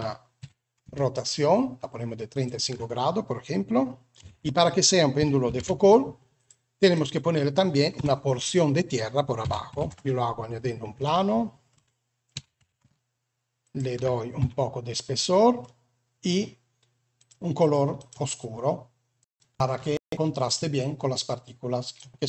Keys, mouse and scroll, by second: 0.3 r, 4.2 alt+a, 5.4 shift+a, 7.9 Tab, 9.3 s, 10.9 shift+middle click, 12.3 e, 14.4 Tab, 14.8 middle click, 17.1 click, 17.9 click, 20.4 click.